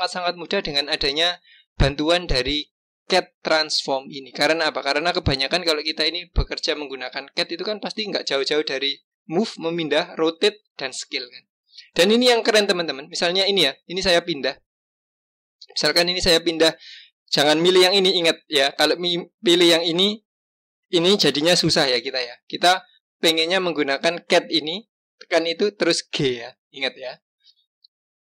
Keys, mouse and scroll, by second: 12.4 click, 13.2 click, 15.0-18.0 drag, 22.0 click, 22.6 click, 24.1-26.1 drag, 26.1 g.